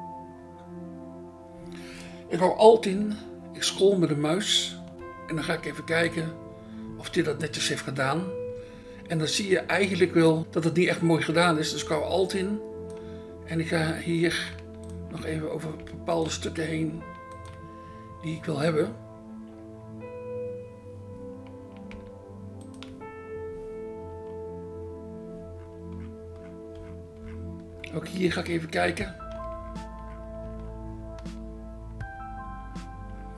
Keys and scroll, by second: 10.4 ctrl+z.